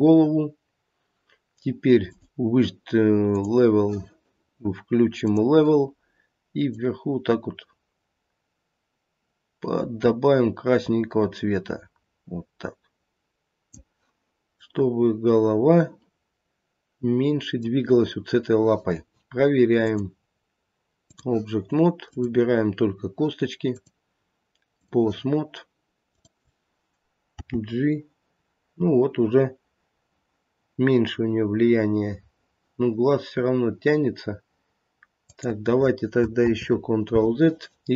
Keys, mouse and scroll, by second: 0.5 scroll down 1, 2.0 click, 5.2 click, 6.7 click, 14.7 middle click, 19.8 click, 22.1 click, 26.1 click, 27.3 g, 36.4 ctrl+z.